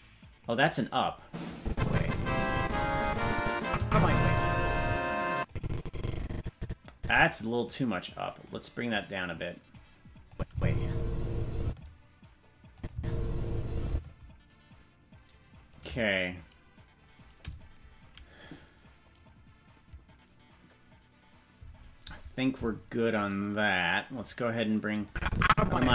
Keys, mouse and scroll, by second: 1.5-3.3 drag, 3.6 click, 3.8 space, 4.8 space, 5.4-7.4 drag, 8.4-9.8 drag, 10.3 click, 10.5 space, 11.6 space, 12.7-14.3 drag, 12.9 space, 13.9 space, 24.2 right click, 25.0-25.9 drag.